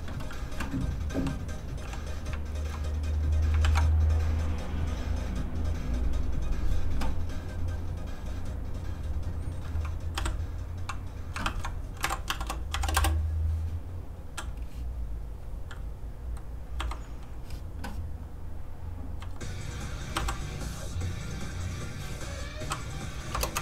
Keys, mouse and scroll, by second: 1.1 click, 1.8 shift+g, 2.4 shift+click, 2.9 click, 3.0 click, 3.6 shift+d, 4.4 click, 10.1 shift+i, 10.9 click, 11.4 shift+r, 12.0 n, 12.7 shift+c, 12.9 Return, 14.5 click, 16.7 o, 20.1 i, 21.4 click, 23.3 KP_0, 23.5 Return.